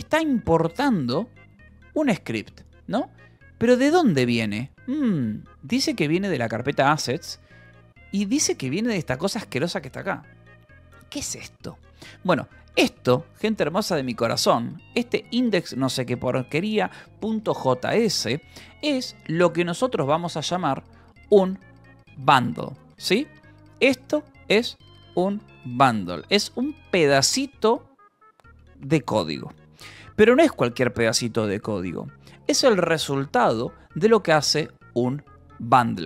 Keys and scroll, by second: 0.0-0.8 typing, 3.3 Escape, 3.8 e, 5.6 k, 7.0 shift+v, 7.3 Escape, 7.9 j, 8.9 shift+v, 12.6-13.6 typing, 14.1 Escape, 15.6 shift+v, 15.7 Escape, 21.0 Return, 21.3-26.3 typing.